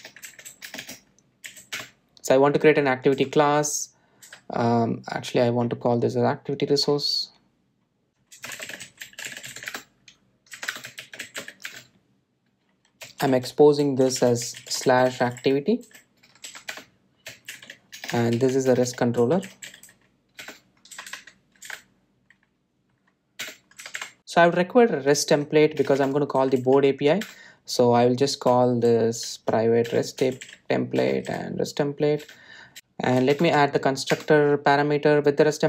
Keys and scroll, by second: 8.3 shift+F6, 12.5 Return, 21.3 Return, 28.1 Return, 32.7 Delete, 34.1 alt+Return.